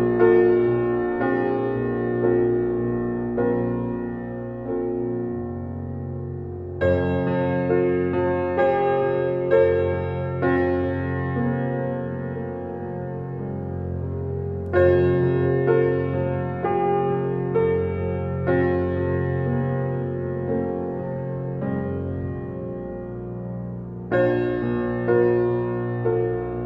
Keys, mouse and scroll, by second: 1.2 g, 2.2-3.4 middle drag, 3.4 g, 4.7-5.2 middle drag, 5.2 scroll down 2, 5.8 shift+a, 8.2-9.6 drag, 9.6 middle click, 11.4-13.2 drag, 14.2-17.7 drag, 18.1-19.5 drag, 19.5 g, 20.9 click, 21.5 click, 22.3 click, 22.6-22.9 middle drag, 22.9 click, 23.4-25.4 middle drag, 25.4 click, 26.0 alt+middle click.